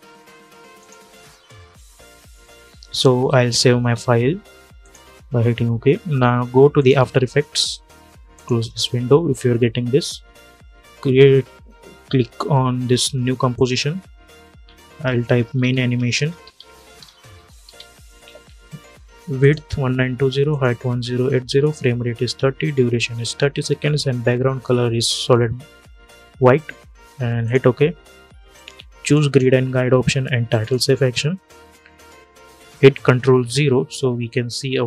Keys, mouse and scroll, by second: 4.5 click, 13.2 click, 14.9-18.0 typing, 19.1 click, 27.1 click, 33.1 ctrl+0.